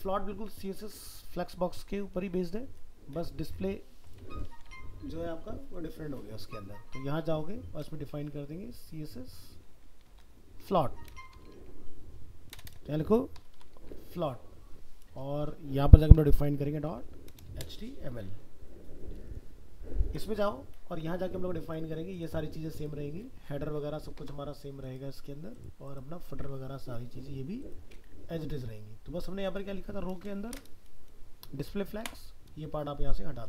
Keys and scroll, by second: 4.5 alt+f, 4.6 alt+秄, 10.2 ctrl+shift+Left.